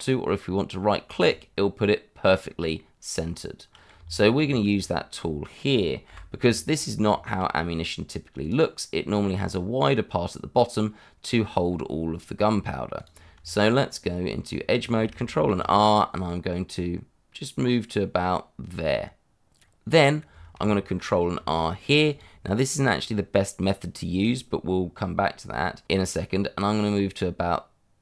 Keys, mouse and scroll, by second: 1.2 right click, 2.3-2.7 scroll down 1, 2.7 middle click, 3.9 Tab, 4.9 shift+middle click, 6.0 Delete, 6.6-7.0 scroll down 1, 7.1 shift+middle click, 7.4-8.4 scroll up 1, 8.4 click, 9.1 shift+middle click, 9.3 middle click, 12.9 click, 13.3 Tab, 15.5 ctrl+r, 16.1 click, 19.4 click, 19.5 scroll up 1, 21.3 ctrl+r, 22.1 click.